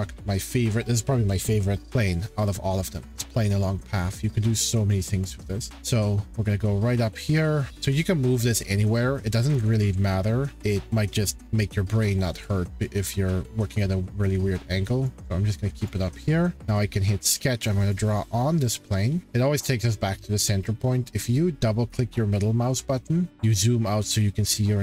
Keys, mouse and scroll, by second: 1.4 scroll, 3.3 click, 4.6 click, 5.7 shift+middle click, 10.7 click, 11.4 middle click, 12.0 middle click, 12.2-12.7 scroll, 15.0 click, 15.9 click, 16.6 click, 17.9 click, 21.7 scroll, 21.9-24.0 middle drag, 24.0 scroll.